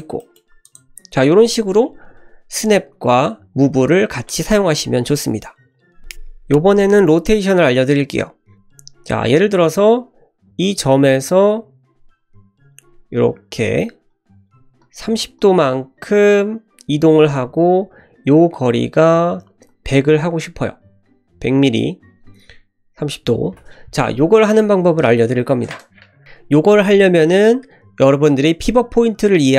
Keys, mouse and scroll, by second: 0.2 middle drag, 0.6 click, 8.8 click, 9.7 ctrl+z, 10.5 click, 11.4 click, 12.2 click, 13.1 click, 14.1 click, 14.8 click, 15.4 click, 16.5 click, 18.9 click, 19.3 click, 19.7 click, 20.9-22.2 drag, 22.9 click.